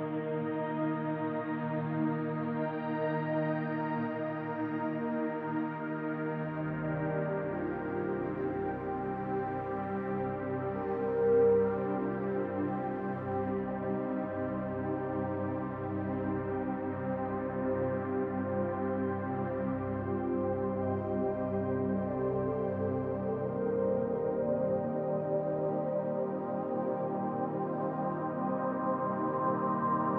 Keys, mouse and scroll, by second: 0.7 click, 1.6 click, 2.6 middle click, 3.3 middle click, 4.5 scroll up 1, 7.3 click, 15.5 click, 19.1 click, 21.5 middle click, 24.4 middle click, 28.6 click.